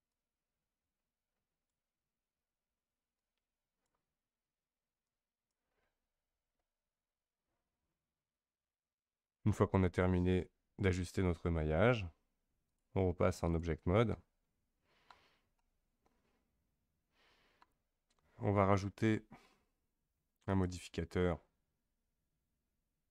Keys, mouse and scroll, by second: 12.7-14.4 drag, 14.4-15.2 middle drag, 15.2-15.6 scroll down 3, 15.6-18.6 middle drag, 20.5-22.9 drag.